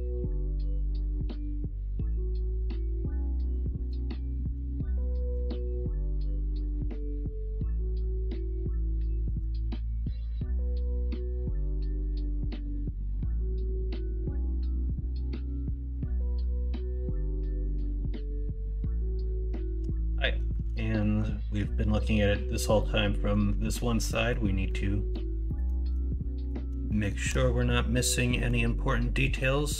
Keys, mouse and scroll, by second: 0.1-2.2 middle drag, 2.2 Tab, 3.3 alt+z, 4.0 alt+z, 4.4 middle drag, 5.5 shift+middle drag, 6.1 middle click, 7.0 shift+middle drag, 8.5 middle drag, 9.0 shift+middle drag, 9.5 middle drag, 10.1-11.1 middle drag, 11.6 middle drag, 12.6-15.9 middle drag, 18.2-19.5 middle drag, 19.9 middle click, 20.2 shift+middle drag, 20.9 middle drag, 23.1 middle click, 24.1 middle click, 24.6 middle drag, 24.9 middle drag, 25.4 middle drag, 26.0 middle click, 26.9 shift+middle drag, 28.3 middle click.